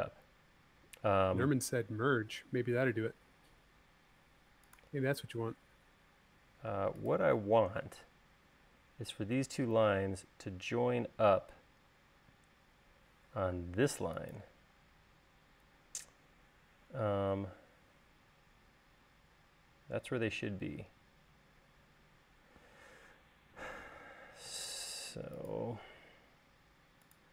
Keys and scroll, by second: 0.9 |, 8.1 |, 14.1 space, 24.3 l.